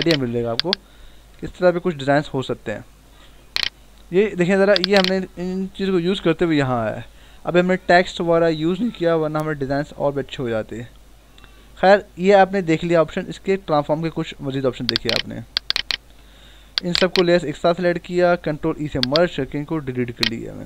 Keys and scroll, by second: 0.5 shift+v, 5.7 ctrl+=, 14.5 ctrl+t, 16.0 Escape, 18.4 ctrl+e.